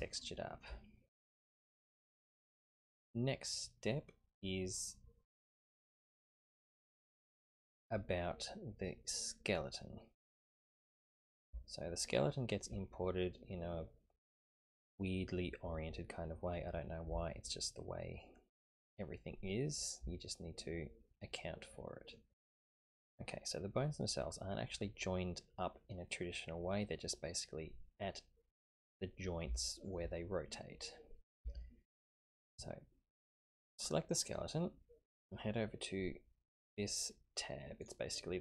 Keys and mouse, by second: 0.1-0.6 shift+middle drag, 0.9-2.1 middle drag, 11.6-12.6 shift+middle drag, 12.9-14.3 middle drag, 13.5 typing, 20.5-22.2 middle drag, 26.8-28.8 middle drag, 29.6-29.9 shift+middle drag, 30.2-31.4 middle drag, 31.6-32.0 shift+middle drag, 34.2 click, 37.3 typing, 37.8-38.4 drag.